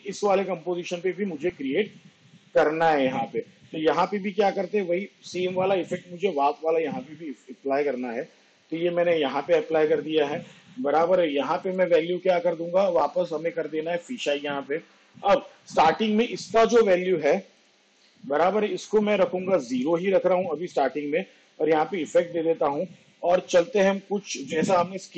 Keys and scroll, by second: 20.0 0, 24.6 ctrl+Right.